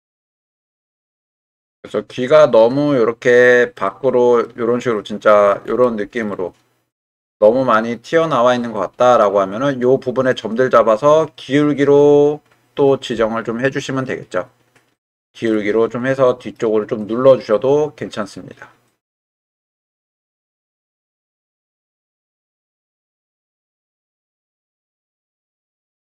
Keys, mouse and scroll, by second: 3.4-3.7 middle drag, 3.8 middle click, 6.3-6.9 shift+middle drag, 8.7-10.3 middle drag, 15.4-16.6 middle drag, 16.1-16.6 drag, 17.5-19.9 middle drag, 21.4-22.0 middle drag, 22.8-23.1 middle drag.